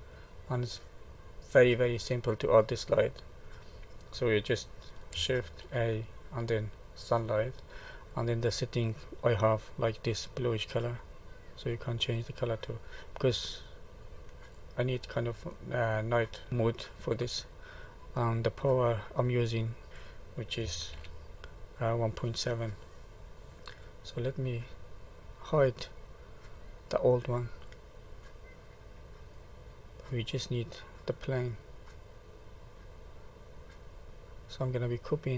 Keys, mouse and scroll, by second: 0.3-2.2 scroll up 11, 3.1 middle click, 5.6 shift+a, 8.1 click, 9.7 click, 15.5 middle click, 16.7 middle click, 19.8 click, 21.0 ctrl+z, 23.5 middle click, 27.4 click, 28.2 middle click, 34.8 click.